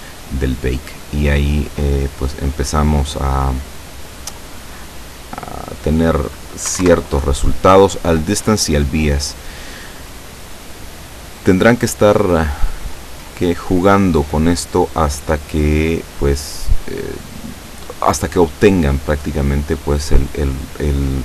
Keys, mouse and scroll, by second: 4.6 scroll down 1, 5.6 click, 6.7 1, 6.9 Return, 9.1 click, 12.4-13.9 drag, 14.5 click, 15.6 click, 19.9 click, 20.6 click.